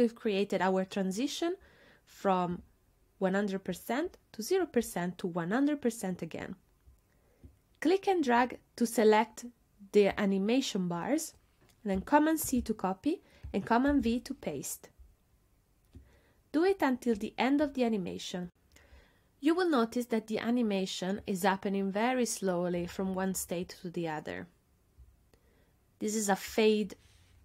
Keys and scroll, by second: 12.5 super+c, 13.9 super+v.